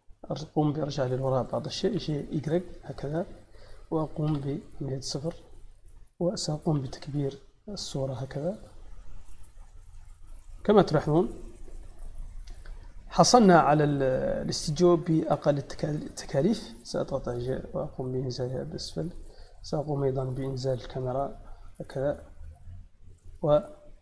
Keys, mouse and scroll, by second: 3.3 click, 10.3 click, 10.7 middle click, 11.8-13.0 shift+middle drag, 15.1 shift+middle click, 16.9 g, 18.5 click, 19.4 click, 20.7 g, 23.1 click.